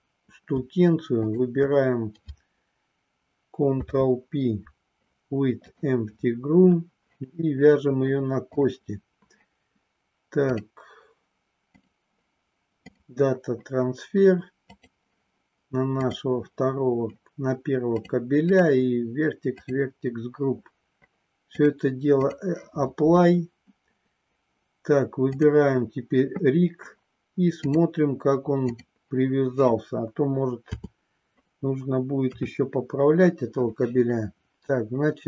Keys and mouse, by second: 1.2 shift+click, 3.6 ctrl+p, 11.7-13.0 drag, 18.0 click, 18.6 click, 19.7 click, 21.6 click, 27.6-28.8 drag, 30.6 KP_7, 32.2 KP_3.